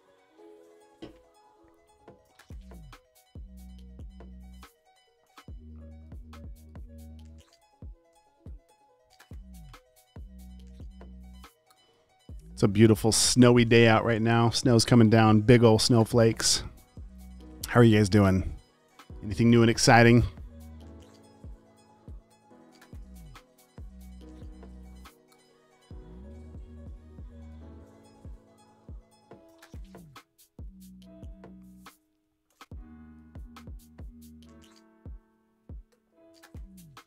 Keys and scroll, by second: 5.5 super+n, 7.5-8.5 typing, 10.0 Return.